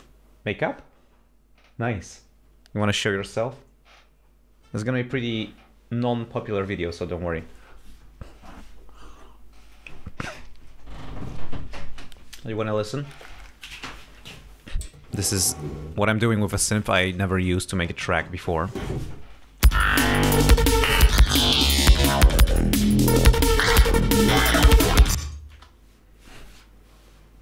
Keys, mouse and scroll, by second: 17.0 click, 19.8 space, 25.7 space.